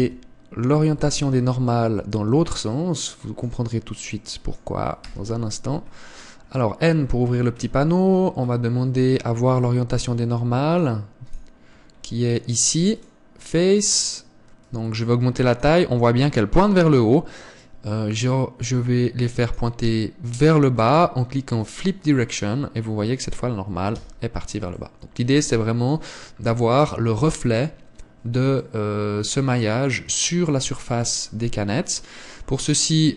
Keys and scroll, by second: 0.8 Tab, 1.8 a, 2.0 a, 5.9 n, 24.8 Tab.